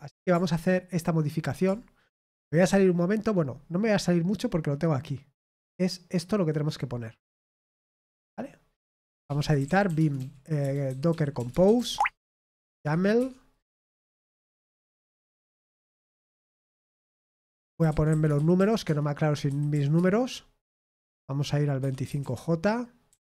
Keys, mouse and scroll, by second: 5.7-8.3 drag, 9.5-12.2 typing, 18.8-20.2 typing.